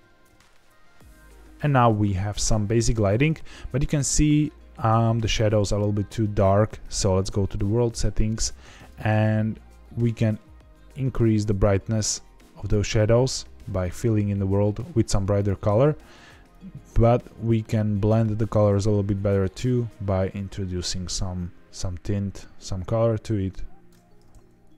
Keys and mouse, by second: 8.7 click, 15.3 click.